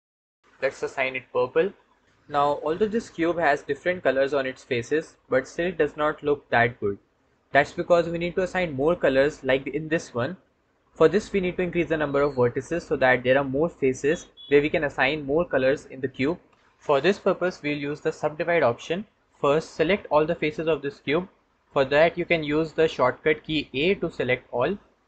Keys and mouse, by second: 23.7 a.